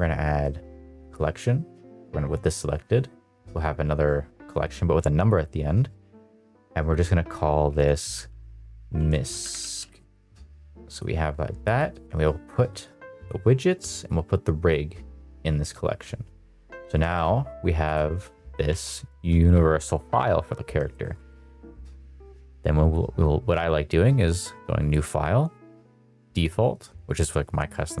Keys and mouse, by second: 0.8 click, 5.1 click, 5.3-10.9 drag, 9.4 BackSpace, 11.6 click, 14.0 click, 16.9 middle click, 18.7 ctrl+s, 19.1 middle drag, 20.8 middle click, 21.2 middle click, 22.8-28.0 drag.